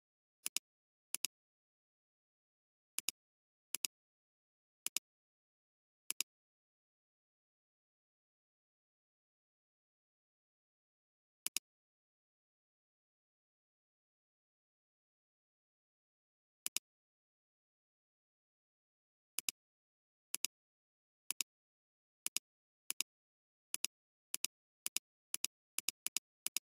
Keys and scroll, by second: 2.0 alt+space, 2.9 alt+space, 9.6 b, 11.4 alt+space, 12.0 alt+space, 15.2 [, 15.9 [, 16.0 [, 16.3 [, 17.8 ctrl+z.